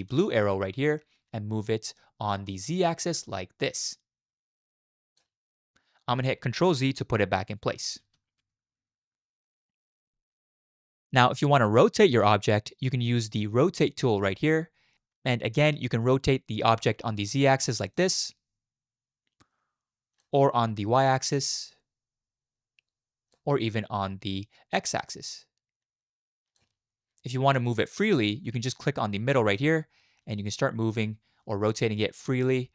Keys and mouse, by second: 1.6-2.0 middle drag, 2.5-5.2 middle drag, 8.0 ctrl+z, 8.4 ctrl+z, 8.7 ctrl+z, 9.4 shift+middle drag, 9.7 middle drag, 14.3 click, 17.9 click, 21.4-23.3 drag, 25.0 click, 25.0-26.6 middle drag, 29.7-32.7 drag.